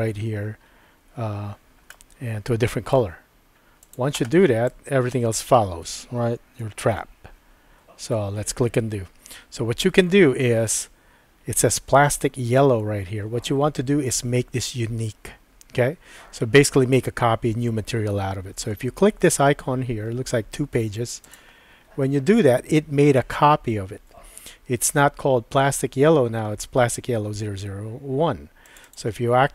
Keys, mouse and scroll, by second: 1.9-3.0 middle drag, 8.4 super+z, 21.3 click, 28.7 click, 28.8-29.5 drag.